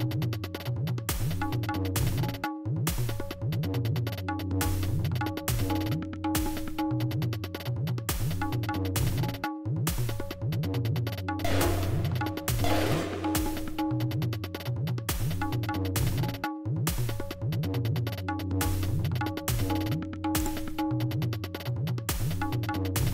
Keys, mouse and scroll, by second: 0.5 g, 1.0 right click, 4.5 click, 5.4 space, 7.0 space, 8.5 space, 9.4 e, 10.8 e, 11.2 click, 12.5-13.4 drag, 14.4-15.0 scroll down 2, 15.0-17.6 scroll up 3, 17.6-18.0 scroll up 1, 18.0 scroll down 2, 18.1-19.5 scroll up 2, 21.4 d, 22.5-23.1 drag.